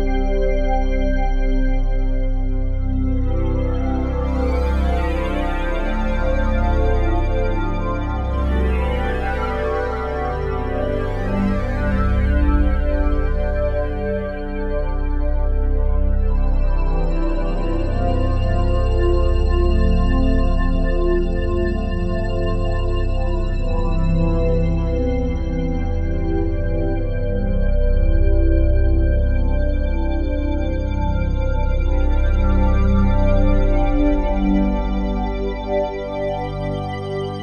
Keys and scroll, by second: 7.6 s, 29.1 Delete, 31.0 ctrl+z, 36.9 c.